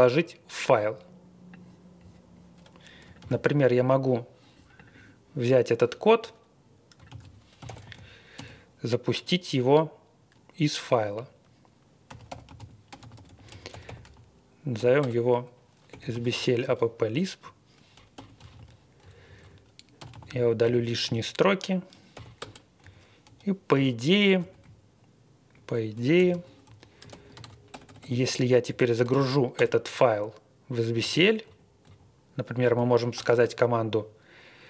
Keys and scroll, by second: 3.2 super+c, 7.1 super+c, 7.3-8.3 typing, 11.8-15.9 typing, 16.1 super+v, 16.6 Escape, 16.8 Up, 17.1 Up, 17.1 Up, 17.2 Up, 17.2 Up, 17.2 Up, 17.3 Up, 17.3 Page_Up, 17.9-18.9 typing, 19.0 Page_Down, 20.0 d, 20.3 Down, 20.6 Up, 20.6 x, 22.1 i, 22.4 Return, 22.8 Down, 23.8 Escape, 24.4 Page_Up, 24.6-25.5 Right, 25.9-29.6 typing, 30.9 Up, 31.1 Up, 31.4 Up, 31.8 Up, 32.6-33.3 typing.